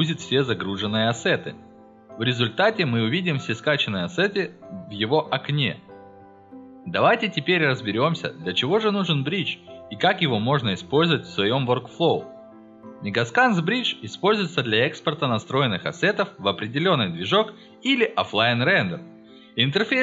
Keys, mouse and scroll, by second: 1.3-2.4 scroll down 7, 2.7-3.3 scroll up 2, 3.5 scroll up 2, 6.1-6.7 scroll down 4, 6.9-7.9 scroll up 4, 14.9 scroll down 2, 15.8 scroll up 2, 16.0-16.4 scroll down 1.